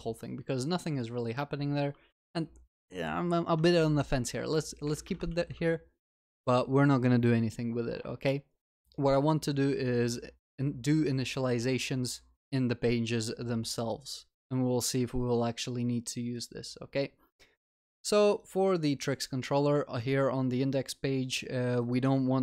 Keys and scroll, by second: 5.3 ctrl+z, 5.5 ctrl+s.